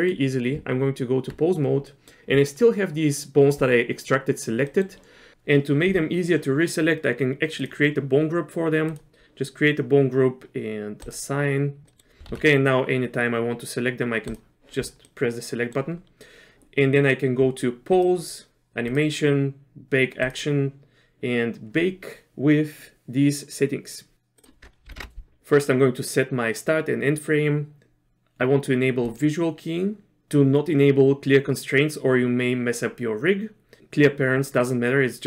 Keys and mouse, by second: 0.5 Tab, 1.9 middle click, 4.7 middle click, 7.6 click, 9.0 click, 11.9 middle click, 12.3 alt+a, 14.3 click, 15.0 middle click, 16.5 space, 17.9-35.2 drag.